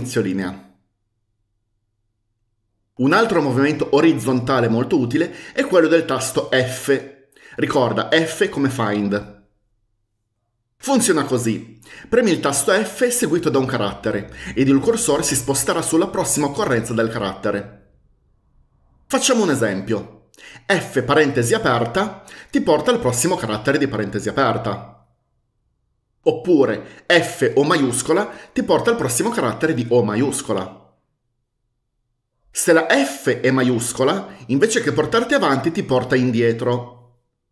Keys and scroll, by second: 21.0-21.4 typing, 27.3-27.7 typing.